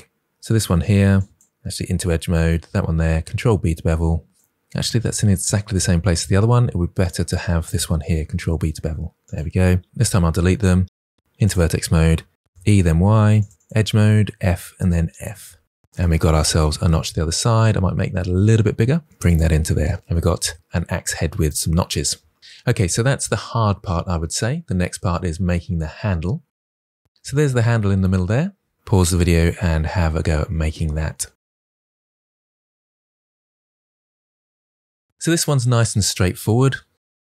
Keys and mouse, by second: 1.6 2, 3.2 ctrl+b, 5.9 ctrl+z, 6.9 click, 8.1 ctrl+b, 9.1 click, 9.9 Delete, 11.2-15.0 typing, 11.3 click, 15.8 Tab, 17.5 KP_1, 17.8 Tab, 18.3 1, 18.8 g, 19.3 click, 19.6 Tab, 24.6 middle click, 37.2 KP_1.